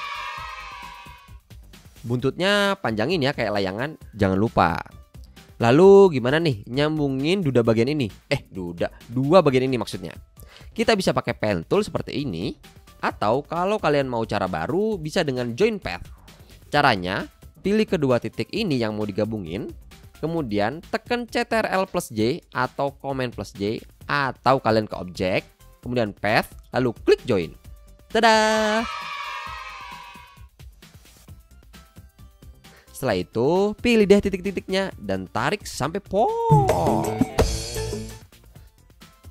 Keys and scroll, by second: 2.1 a, 29.6 a, 31.1 Down, 31.2 Up, 33.1 a, 37.8 v.